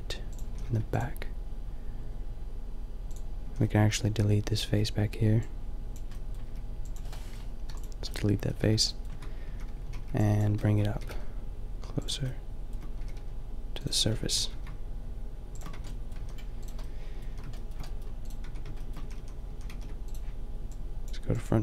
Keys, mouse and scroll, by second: 0.4 a, 0.6 ctrl+r, 3.5 a, 4.6 b, 6.6 b, 7.5 Delete, 8.6 Tab, 9.1 Tab, 9.5 a, 9.8 a, 10.0 b, 10.9 g, 12.3-14.0 drag, 13.0 g, 14.0 middle click, 14.3 g, 15.7 Tab, 16.1 a, 17.2 middle drag, 17.5 a, 17.6-19.4 middle drag, 18.5 Tab, 19.0 a, 19.2 a, 19.5 a, 19.7 ctrl+r, 20.9 click.